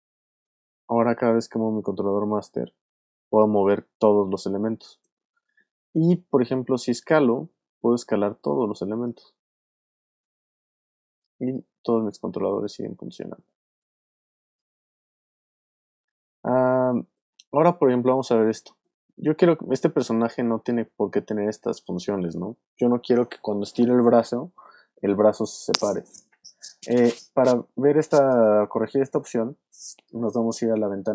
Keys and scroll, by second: 1.1 super+z, 3.0 super+z, 3.8 super+space, 9.9 shift+super+z, 13.2 super+z, 15.0 super+z.